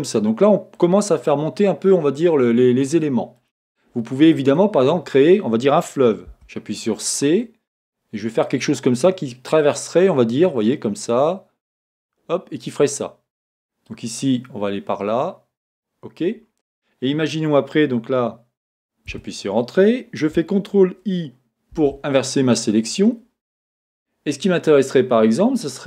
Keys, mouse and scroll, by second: 6.3 c, 19.2 Return, 21.7 ctrl+Return.